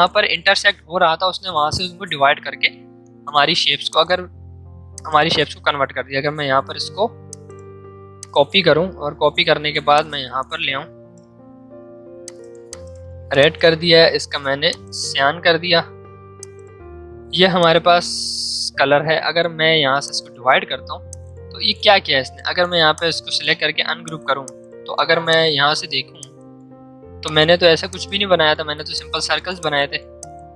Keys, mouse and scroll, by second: 2.8 ctrl+z, 3.8 click, 4.1 ctrl+z, 4.9 click, 6.1 v, 7.3 click, 8.1-9.9 alt+drag, 9.9-12.2 alt+drag, 15.8 v, 16.4-20.0 drag, 22.1 right click, 22.9 click, 23.3 right click, 24.0-30.5 drag.